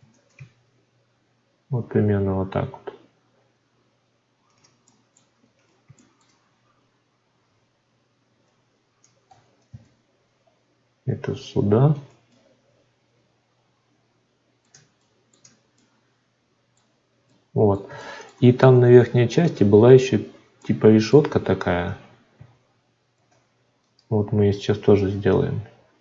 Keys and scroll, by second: 23.1 shift+d.